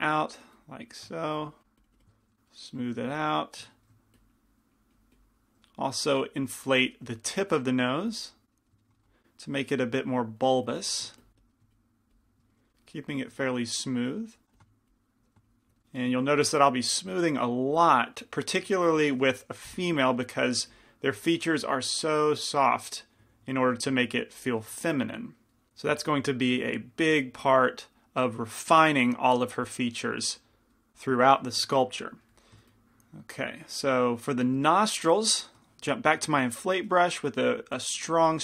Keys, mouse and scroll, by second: 3.4-7.8 middle drag, 4.3-9.4 drag, 9.4 middle click, 10.0-13.3 drag, 10.0-11.4 middle drag, 10.0-11.1 right drag, 11.6-13.3 middle drag, 11.6-13.0 right drag, 14.6 f, 14.8-16.1 drag, 14.8 middle click, 15.3 middle click, 19.6 click, 19.6 middle click, 20.0 g, 20.0 f, 20.8 f, 21.7-26.0 drag, 21.7 middle click, 32.9-34.9 drag, 36.6 i, 36.6 shift+f, 38.0 f.